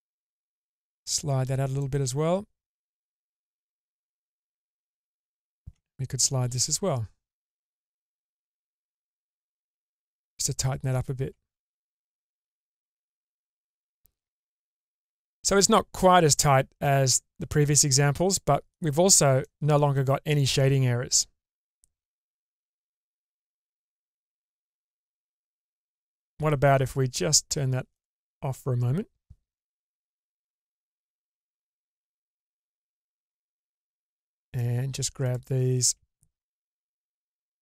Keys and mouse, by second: 0.3 g, 3.4 middle click, 5.1 alt+click, 6.5 g, 11.3 Tab, 13.0-15.0 middle drag, 17.8-18.7 middle drag, 19.4-23.7 middle drag, 24.0 Tab, 25.0 middle click, 27.9 click, 29.6 click, 30.6-31.7 shift+middle drag, 34.1 middle click, 35.3 ctrl+click, 37.2 g.